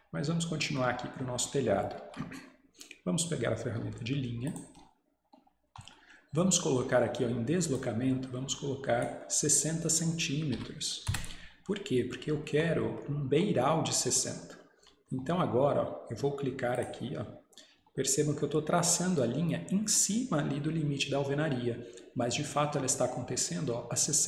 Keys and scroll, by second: 10.6 6, 11.1 Return.